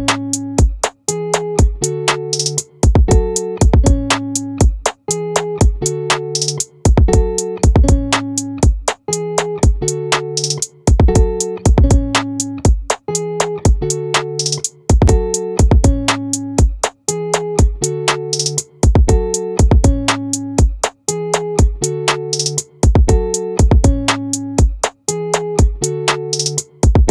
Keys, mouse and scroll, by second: 4.6-6.0 drag, 11.5-12.9 middle drag, 17.1 middle click, 21.3 click, 22.5 click.